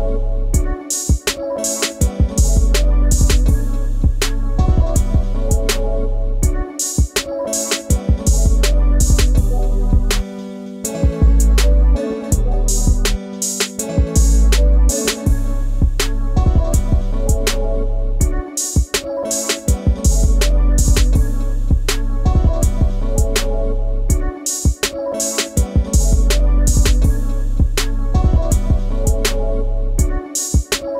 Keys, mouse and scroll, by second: 0.2-4.4 drag, 4.4-5.4 scroll up 2, 5.4-6.6 shift+middle drag, 6.6 click, 7.4 ctrl+t, 9.6-12.4 middle drag, 12.4-14.3 shift+drag, 14.3 middle click, 14.3 scroll down 1, 14.4 middle click, 14.6 shift+click, 14.8 ctrl+z, 14.8 ctrl+z, 14.9 click, 15.3 shift+middle click, 16.0 Right, 16.2-17.8 drag, 18.0-19.1 shift+drag, 19.2 shift+click, 20.0 shift+click, 20.2 shift+click, 20.4 Tab, 20.6 middle click, 21.4 click, 22.0 click, 22.9 shift+click, 24.3-25.4 middle drag, 25.4 shift+click, 25.9 shift+click, 27.0 a, 27.5 shift+click, 27.7 middle click, 28.1 shift+click.